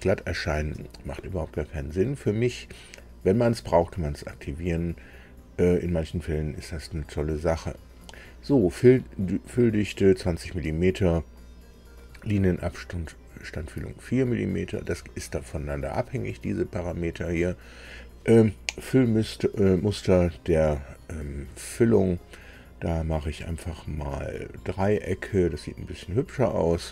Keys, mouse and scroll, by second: 6.2-8.1 drag, 21.7 click, 24.8 click.